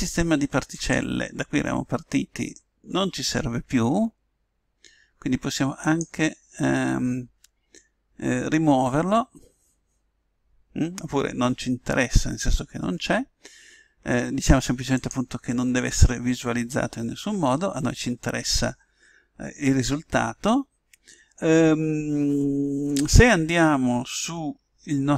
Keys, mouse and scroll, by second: 0.7 click, 5.8 click, 14.9 click, 24.8-25.1 middle drag.